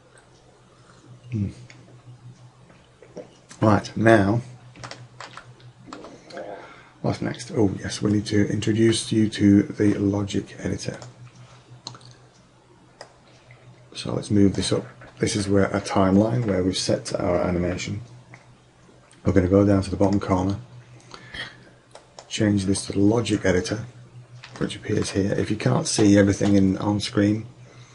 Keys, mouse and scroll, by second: 5.0-5.4 middle drag, 5.4-7.4 shift+drag, 11.0-12.5 right drag, 13.3 click, 14.2-14.8 drag, 20.1-21.5 drag, 24.0-24.7 middle drag, 24.7-26.4 drag, 26.5-27.9 middle drag.